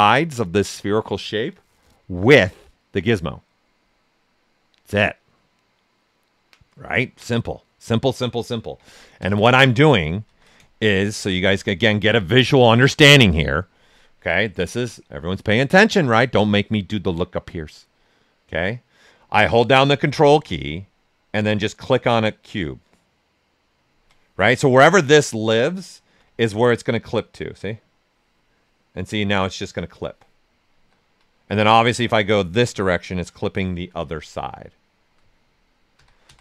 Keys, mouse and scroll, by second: 8.8 ctrl+z, 9.5 right click, 10.2 ctrl+z, 10.5 shift+right click, 20.0 ctrl+alt+right click, 21.4-24.8 ctrl+drag, 24.8-26.5 alt+drag, 26.5-30.7 ctrl+drag, 30.7 ctrl+z, 32.2-34.7 ctrl+drag, 34.7 alt+right click, 35.9 ctrl+z.